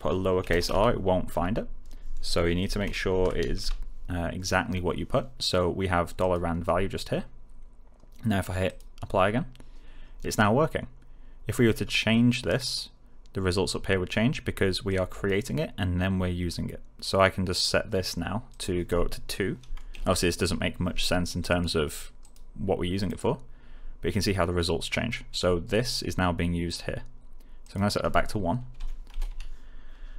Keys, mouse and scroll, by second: 0.6 r, 1.3 a, 3.1-4.0 typing, 6.1 click, 8.6 click, 12.5 click, 14.8-15.4 click, 18.4 click, 20.4 2, 21.4 click, 27.6 click, 28.7 Right.